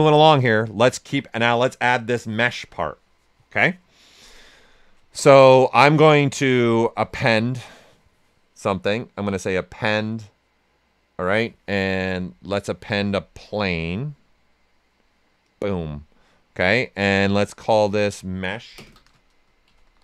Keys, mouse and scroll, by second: 0.0-0.2 typing, 5.9-8.9 drag, 8.9 typing, 14.2 click, 14.2 typing, 19.4-20.0 typing.